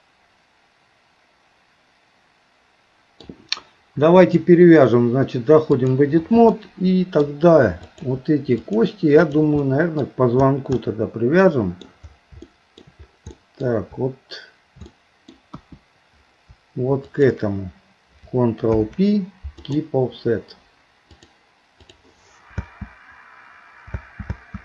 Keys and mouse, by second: 4.2-6.0 drag, 6.6 middle click, 7.8 click, 8.6 shift+click, 9.2 shift+click, 10.8-11.9 middle drag, 12.4 shift+middle click, 13.3 middle click, 14.9 middle click, 15.5 KP_1, 17.1 shift+click, 18.9 ctrl+p, 21.3 click, 22.7 space, 24.0 space.